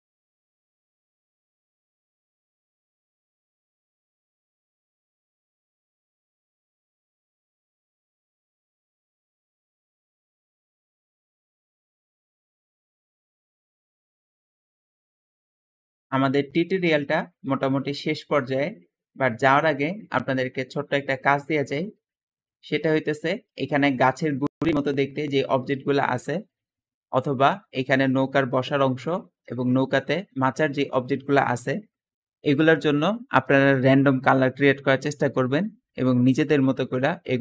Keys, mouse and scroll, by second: 0.8 click, 3.0 ctrl+v, 3.0 ctrl+v, 3.4 click, 4.0 ctrl+click, 4.4 click, 5.5 ctrl+v, 5.6 ctrl+v, 6.4 click, 6.8 click, 8.0 ctrl+v, 16.8 `, 22.8 click.